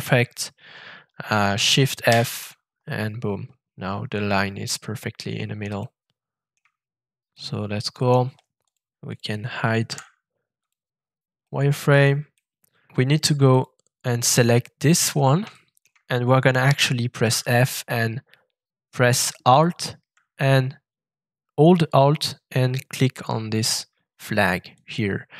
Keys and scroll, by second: 2.1 shift+f, 9.8 f, 17.2 shift+f.